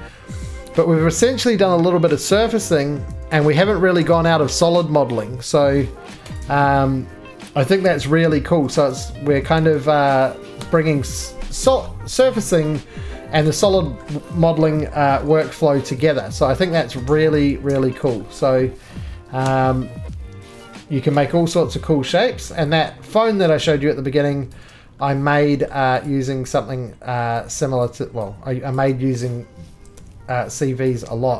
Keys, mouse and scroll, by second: 0.4 middle click, 1.5-2.4 scroll down 2, 3.1 ctrl+z, 3.6 ctrl+z, 4.0 ctrl+z, 6.1 3, 6.4 click, 7.8 d, 8.7 ctrl+z, 9.6 ctrl+z, 10.6 s, 11.5 middle click, 12.1 middle click, 13.4 shift+click, 13.6 scroll, 14.0 middle click, 14.0-14.4 scroll down 2, 15.1 g, 16.9 click, 17.0 z, 17.5 ctrl+z, 18.4 middle click, 19.4 1, 21.1 g, 22.3 middle click, 22.8 middle click, 24.5 ctrl+click, 24.5 ctrl+z, 25.6 middle click, 26.1 click, 26.5 middle click, 27.9 shift+click, 28.7 click, 29.9 g.